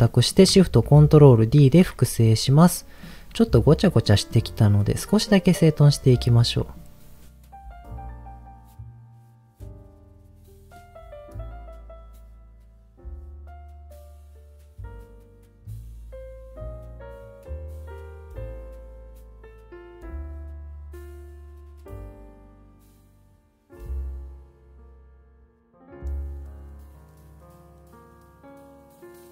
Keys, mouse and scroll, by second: 1.5 ctrl+shift+d, 3.0 click, 3.2-3.7 scroll down 4, 4.0 middle click, 4.8 middle click, 5.7-6.7 drag, 7.4 middle click, 9.0 click, 9.7 click, 9.9 middle click, 10.2-11.2 drag, 11.4 middle click, 11.9 middle click, 12.2 click, 12.5 scroll down 1, 12.6 middle click, 13.0 click, 13.5 click, 14.7 click, 15.4 click, 16.0 scroll up 3, 16.2 middle click, 16.4 click, 16.8 click, 17.1 click, 17.6 click, 18.1 middle click, 18.4 scroll down 2, 18.5 middle click, 18.6 middle click, 18.9 click, 19.6 click, 19.7 click, 19.9 click, 20.4 click, 20.6 click, 21.4 middle click, 21.6 middle click, 21.7 scroll up 2, 21.9 click, 22.2 click, 22.9 click, 23.3 click, 23.8 middle click, 24.0 click, 24.5 middle click, 24.7 click, 25.6 click, 25.7 middle click, 25.8 scroll down 2, 25.9 middle click, 26.4 middle click, 26.7 middle click, 26.7-27.1 scroll down 4, 27.1 middle click, 27.2 click, 27.5 click, 28.0 scroll up 2, 28.2 middle click, 28.2-28.6 scroll down 3, 28.9 click, 29.0-29.3 scroll up 6, 29.2 middle click.